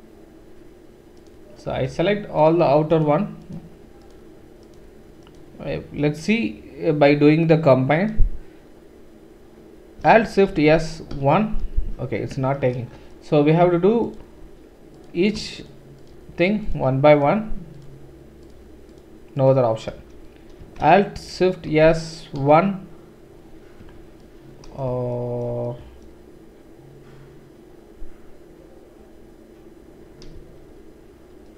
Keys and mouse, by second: 1.2 shift+click, 1.2 shift+middle click, 1.8 shift+click, 1.8 shift+middle click, 2.9 shift+click, 3.5-4.7 shift+drag, 5.3 shift+click, 10.5 alt+shift+s, 14.0 alt+click, 14.0 alt+right click, 15.0 click, 15.0 right click, 15.6 shift+click, 15.6 shift+right click, 16.0 shift+click, 16.7 shift+click, 17.2 shift+click, 19.4 shift+click, 19.8-28.2 right drag, 21.7 alt+shift+s.